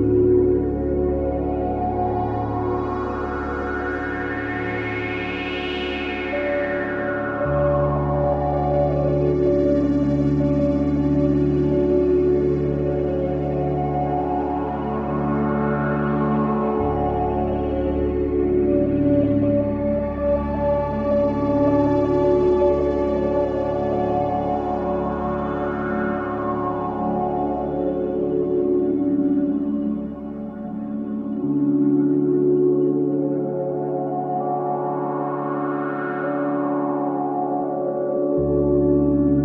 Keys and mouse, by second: 0.4 ctrl+s, 1.6-5.6 drag, 6.5-7.2 drag, 7.7 click, 9.0-10.4 typing, 10.9 Caps_Lock, 11.2 click, 13.1-15.0 typing, 17.5 typing, 18.8-19.5 typing, 19.0-20.9 alt+drag, 21.6 click, 23.2 click, 25.0 click, 25.1 click, 26.1-28.2 typing, 29.7-30.5 typing, 30.7-31.9 drag, 31.7-32.4 typing, 33.7-35.2 alt+drag, 35.0-37.2 typing.